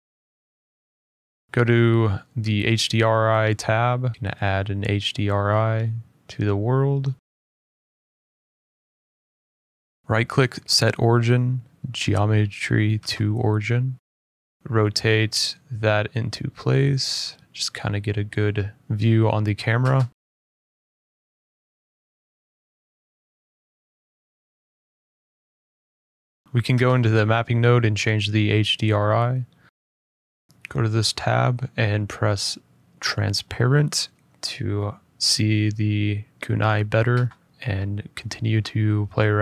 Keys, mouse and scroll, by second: 0.3 middle click, 1.4 click, 2.0 click, 3.1 click, 4.2 middle click, 4.3 click, 5.9 middle click, 6.0 middle click, 6.2 scroll, 6.9 click, 7.7 click, 8.2-9.8 scroll, 9.8 scroll, 10.8 right click, 13.0 click, 13.7 scroll, 15.2 F12, 15.2 scroll, 15.3 middle click, 16.2-17.3 scroll, 17.3 click, 19.6 click, 21.2 typing, 23.2 click, 23.2 s, 24.5 middle click, 24.5 g, 24.9 scroll down 1, 24.9 middle click, 26.4 middle click, 30.4 click, 32.3-32.7 scroll, 33.4 click, 33.6-34.8 scroll, 34.9 click, 35.9-37.3 scroll, 37.3 click.